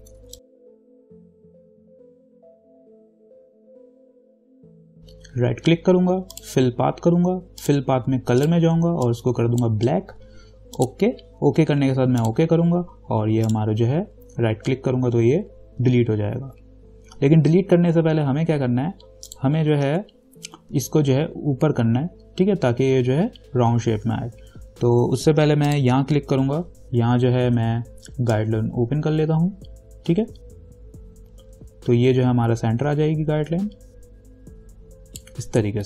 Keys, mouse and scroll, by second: 0.3 space, 0.4 click, 0.4 space, 0.5 ctrl+=, 0.6 space, 0.6 click, 1.3 alt+click, 1.5-2.6 ctrl+drag, 2.6 ctrl+-, 2.7 click, 2.7-4.0 typing, 2.8 click, 2.9 click, 2.9 click, 3.1 click, 3.1 click, 3.3 click, 3.8 click, 3.9 click, 4.0 click, 4.2 ctrl+=, 4.2 click, 4.4 ctrl+click, 4.8 ctrl+-, 4.9 ctrl+0, 5.0 right click, 6.5-11.0 drag, 13.7 right click, 19.5 click, 20.0 ctrl+z, 25.9 click, 27.7 v, 28.5-35.8 drag.